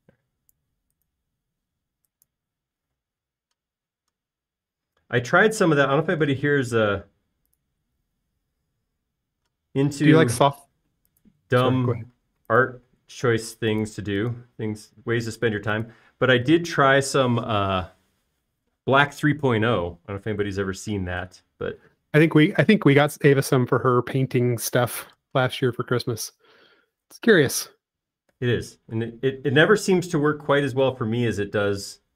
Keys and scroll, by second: 4.2 m, 13.7 m, 23.6 space, 26.0 q, 31.3 Right.